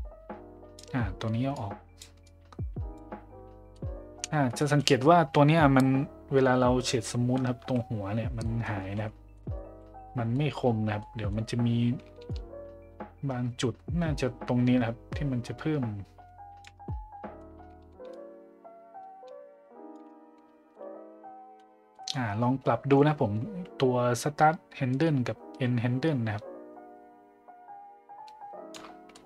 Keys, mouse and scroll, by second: 1.6 click, 2.2-3.0 drag, 3.7 middle click, 4.6 middle click, 8.4 middle click, 9.3 middle click, 10.3 middle click, 11.0 middle drag, 12.3-16.6 shift+drag, 16.8 middle click, 18.1-20.0 shift+drag, 20.7-21.6 middle drag, 21.9 middle drag, 25.0-28.8 shift+drag, 29.1-29.2 middle drag.